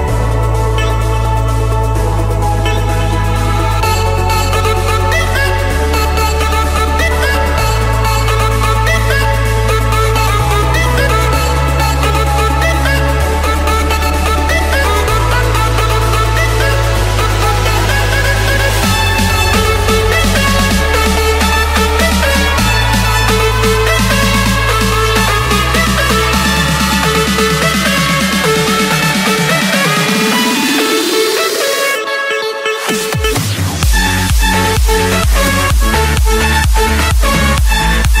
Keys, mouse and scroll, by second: 0.4-1.4 drag, 2.0-3.2 drag, 3.2-4.4 drag, 5.1-6.1 drag, 6.4-7.4 drag, 7.8-8.9 drag, 9.3-10.3 drag, 10.8-11.8 drag, 12.3-13.3 drag, 13.9-15.0 middle drag, 13.9-14.9 scroll, 18.2-19.3 drag, 20.3-21.3 drag, 21.6 click, 22.5-24.0 typing, 25.4 click, 26.9-28.0 drag, 28.5-29.9 typing, 31.4-32.4 drag, 32.6 click, 33.5-35.3 typing, 36.6-38.2 drag, 38.0-38.2 typing.